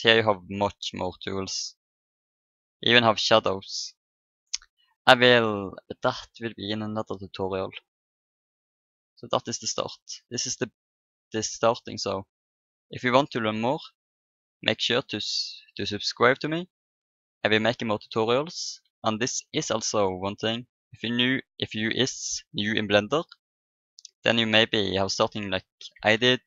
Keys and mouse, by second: 0.7-3.0 drag, 3.0-7.3 middle drag, 7.8-22.2 middle drag, 23.3-26.1 middle drag, 26.1 ctrl+n.